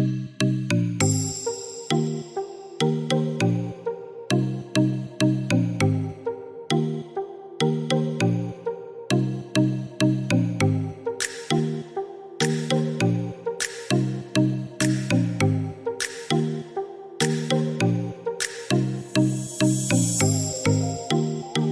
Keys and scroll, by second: 3.6 Escape.